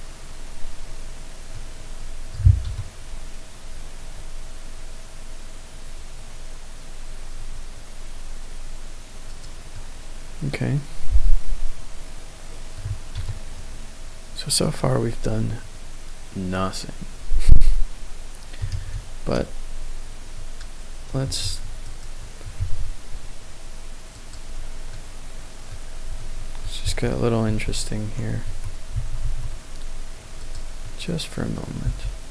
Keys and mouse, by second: 2.6 KP_0, 9.7-12.8 middle drag, 13.1 KP_0, 18.7 shift+a, 22.1 shift+click, 22.5 shift+a, 24.9-25.7 middle drag, 26.1-26.6 shift+middle drag, 26.8 a, 28.9 s, 29.2 y, 30.4 click, 30.8-31.5 middle drag, 31.8 g, 31.9 x.